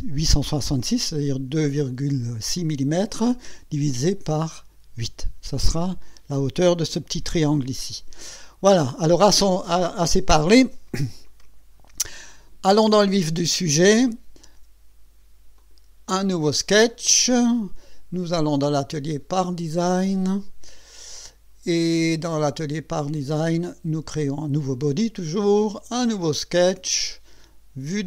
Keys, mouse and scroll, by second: 11.3 click, 12.4 scroll down 2, 13.2-13.6 scroll down 1, 15.6 click, 18.4 click, 19.4 click, 20.9 click, 23.0 click, 24.2 click, 26.2 click.